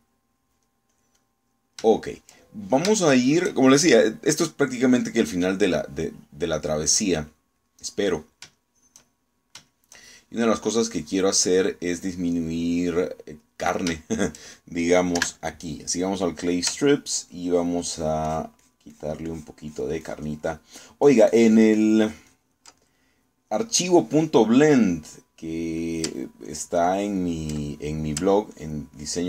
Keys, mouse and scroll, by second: 0.4-1.4 shift+middle drag, 2.0 click, 3.0 shift+middle click, 4.0 shift+middle click, 4.7 shift+middle click, 5.7-9.2 middle drag, 9.5-13.0 shift+middle drag, 14.4 middle click, 16.2 3, 18.0 ctrl+click, 18.6 ctrl+click, 19.0 ctrl+click, 20.8 ctrl+click, 21.2 ctrl+click, 21.5-23.8 ctrl+drag, 23.8-25.6 ctrl+middle drag, 26.4 middle click, 27.5 ctrl+click, 28.0 ctrl+click, 28.6 ctrl+middle click.